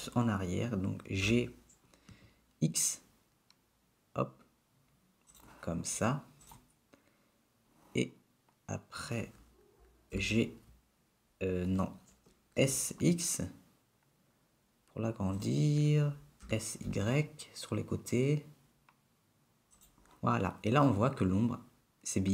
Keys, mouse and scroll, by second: 1.5 g, 6.9 click, 10.2 g, 12.8 s, 16.7 s.